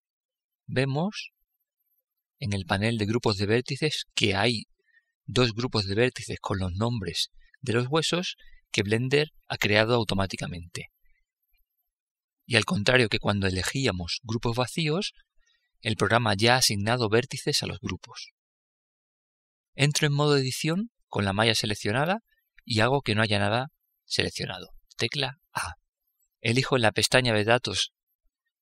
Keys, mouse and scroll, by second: 4.0-5.7 drag, 19.5 Tab, 25.4 a.